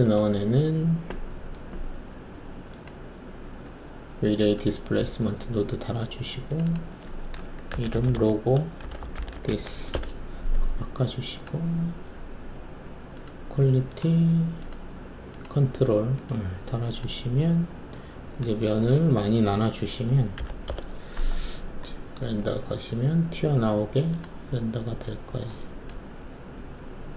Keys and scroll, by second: 7.6-9.6 typing, 9.9 Return, 18.8 1, 20.0-20.4 typing, 20.6 Return, 22.5 shift+F1.